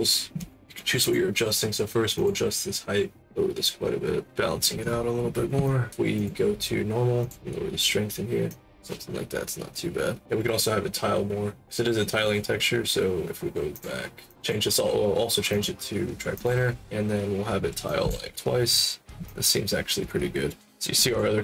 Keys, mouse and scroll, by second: 0.9 click, 2.1 click, 3.2 click, 5.6 alt+click, 6.1 click, 7.2 click, 8.4 click, 13.7 click, 14.2 click, 15.4 click, 16.3 click, 17.8 click, 18.2 4, 19.2-20.6 alt+drag, 21.0 click.